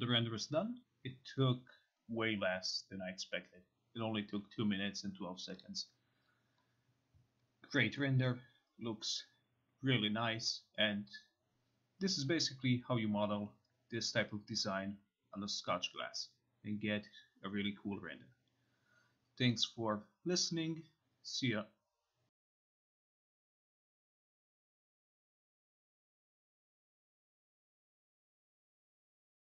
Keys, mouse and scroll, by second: 5.7 click, 6.0-7.4 scroll, 7.4-8.3 scroll, 8.3 scroll, 9.1-10.4 scroll, 10.4 scroll, 12.2 scroll, 15.2-16.2 scroll, 16.2-17.1 scroll, 17.1 scroll, 18.4-18.9 scroll, 19.0-19.5 scroll, 19.7 middle click, 20.4 scroll.